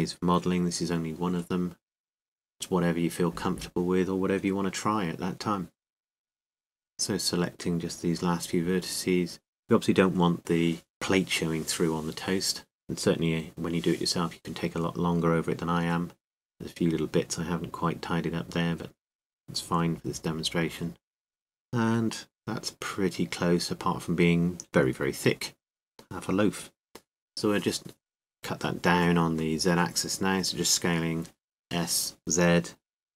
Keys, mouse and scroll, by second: 0.0 a, 2.4 c, 4.0-5.7 right drag, 4.8 g, 5.9 a, 7.4 c, 8.3-9.6 right drag, 8.9 click, 11.0 middle click, 11.0 a, 12.4 c, 13.2-14.9 right drag, 13.8-14.9 drag, 15.5 a, 16.1 c, 18.2 c, 21.1 right click, 21.2 click, 21.2 g, 21.2 a, 21.3-22.4 right drag, 21.9 click, 22.9 Tab, 22.9 right click, 24.7 z, 26.5 z, 27.7 KP_1, 28.6 z, 30.8 s.